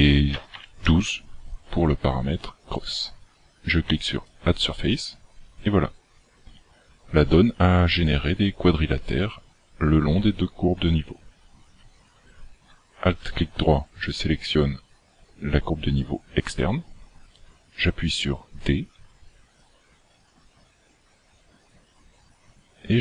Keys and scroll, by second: 19.0 d, 19.5 d, 19.7 d.